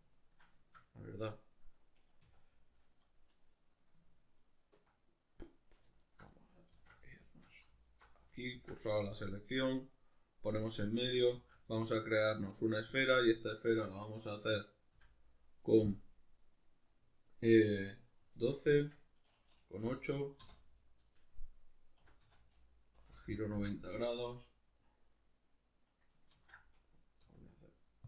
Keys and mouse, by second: 2.3 a, 6.0 alt+right click, 6.3-7.9 middle drag, 6.7 alt+q, 7.9 alt+right click, 8.5 shift+s, 9.8-23.6 middle drag, 11.3 shift+a, 14.9 F9, 23.6 Return, 26.3 ctrl+z, 27.2 s.